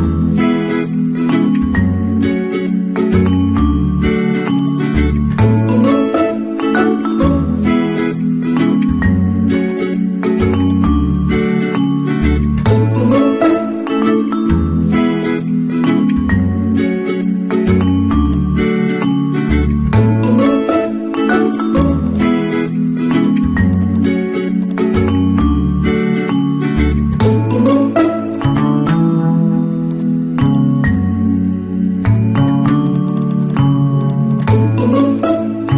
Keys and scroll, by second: 7.7 ctrl+g, 12.6 ctrl+t, 16.0 Return, 16.3 Up, 17.6 ctrl+t, 18.9 Return, 19.3 Down, 20.0 Up, 20.3 Down.